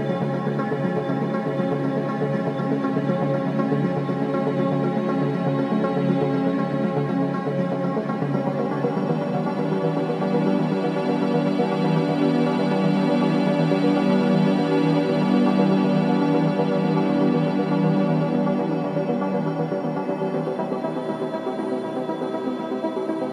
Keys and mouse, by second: 0.0 space, 0.8 ctrl+alt+click, 2.2 click, 2.6 space, 6.7 space, 8.7 click, 9.4 click, 9.9 click, 10.5-13.1 drag, 16.2 r, 16.7 y, 16.9 y, 17.9 Escape, 18.6 r, 19.0 z, 19.1 z, 21.6 click, 22.5 typing, 22.8-23.3 drag.